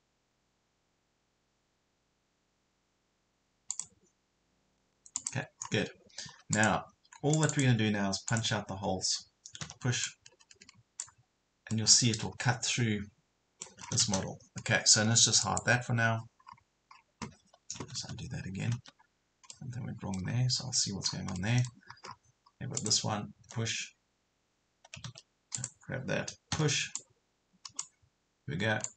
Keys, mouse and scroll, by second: 3.7 click, 5.6 scroll up 1, 6.5 scroll up 1, 6.5 click, 9.6 p, 10.1 click, 11.7-13.9 middle drag, 13.9 scroll down 1, 15.4 click, 16.4 scroll up 1, 18.2 ctrl+z, 19.5 middle click, 20.6-21.0 scroll up 1, 21.1 scroll down 1, 21.4 middle click, 21.9 scroll up 1, 22.1 scroll down 1, 22.4 scroll up 1, 22.8 click, 23.5 Delete, 25.1 ctrl+z, 25.5 click, 26.5 p, 27.0 click.